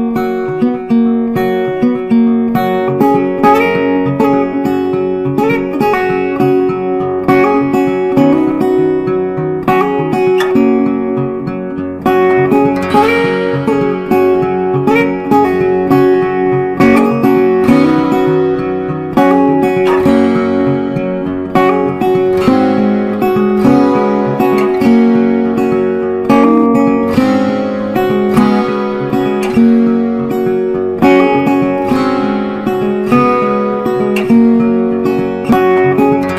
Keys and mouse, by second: 0.8-5.7 drag, 5.7-8.5 drag, 10.4-12.7 typing, 13.0 ctrl+a, 14.9 click, 16.7 click, 20.7 Up, 23.6 click, 24.2 ctrl+a, 25.1 click, 26.1 Return, 27.2 click, 28.2 shift+click, 28.7 c, 29.7 ctrl+g, 32.4-36.3 drag.